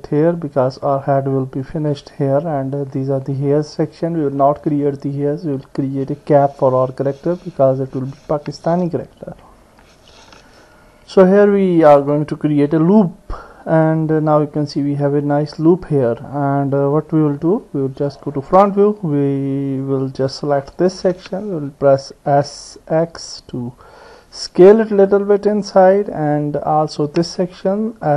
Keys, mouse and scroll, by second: 5.4 click, 6.7-8.8 middle drag, 9.7 ctrl+r, 13.0 middle click, 13.1-16.4 drag, 16.3 middle click, 18.2 KP_1, 20.0 click, 22.4 s, 26.6 click.